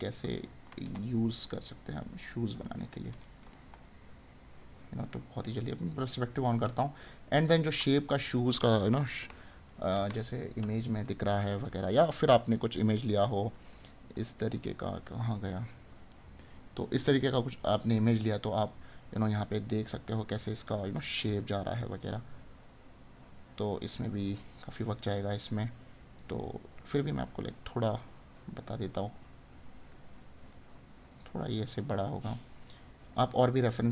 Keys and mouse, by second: 3.8 right click, 24.4 right click, 27.5 right click, 32.1 right click.